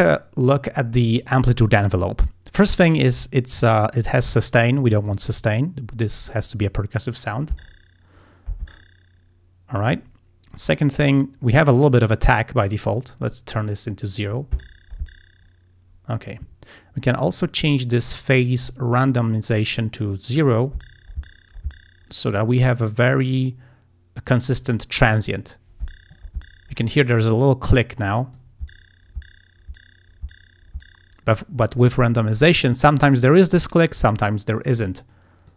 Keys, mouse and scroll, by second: 5.1 click, 12.0-13.1 drag, 18.6-20.6 drag, 28.0 click, 34.9 click.